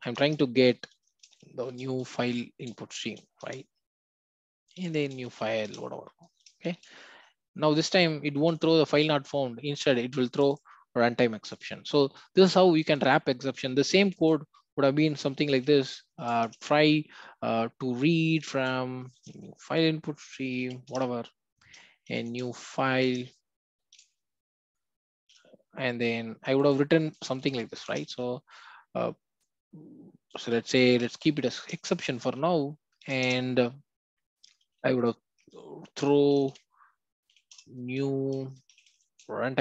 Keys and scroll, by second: 0.1 Return, 3.5 Return, 5.7 Return, 20.9 Return, 23.1 Return, 27.8 Return, 31.6 Return, 37.5 Return.